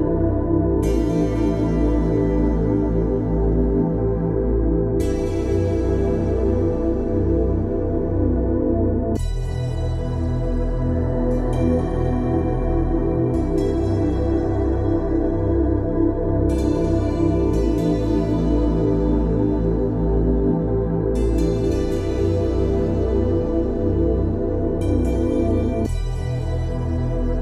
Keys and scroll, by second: 17.2 Return.